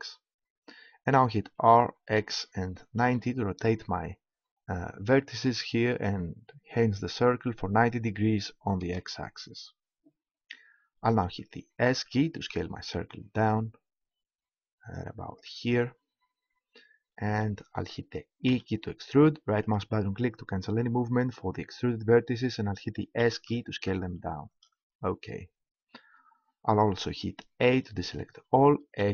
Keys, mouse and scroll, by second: 1.4 r, 11.8 s, 15.4-17.2 drag, 17.4 click, 18.5 e, 19.7-21.5 drag, 23.2 s, 24.6 click, 27.6 a, 29.0 a.